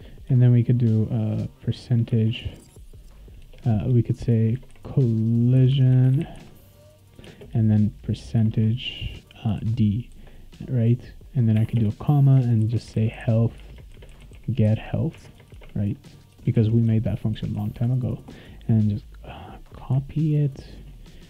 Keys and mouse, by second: 2.1 shift+5, 3.4-7.2 typing, 8.3 shift+5, 9.6 d, 11.5-16.3 typing, 16.5 ctrl+s, 19.4 click, 19.9 ctrl+c, 20.4 click.